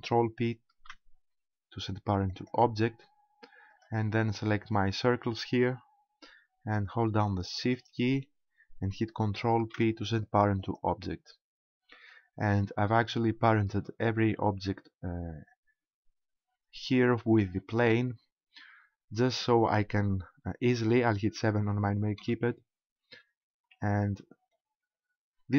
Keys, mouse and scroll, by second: 0.8 ctrl+p, 3.8 right click, 7.6 shift+right click, 9.6 ctrl+p, 17.7 right click, 22.2 KP_7, 23.6 KP_Decimal, 24.3-25.2 scroll down 5, 25.2-25.5 scroll up 2.